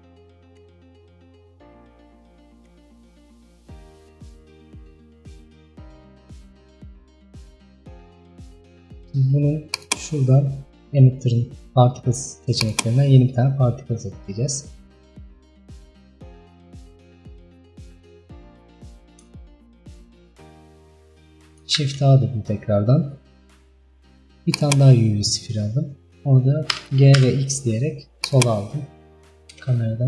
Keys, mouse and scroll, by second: 9.8 drag, 12.7-15.9 drag, 15.9-16.4 middle drag, 16.4-17.4 scroll up 5, 17.4-18.1 scroll down 4, 18.1 middle click, 18.7-19.5 scroll up 1, 19.5-24.7 shift+middle drag, 24.7 shift+a, 25.2-25.6 scroll up 3, 26.8 g, 28.7 scroll down 3, 29.0-29.3 scroll up 2, 29.3 KP_0.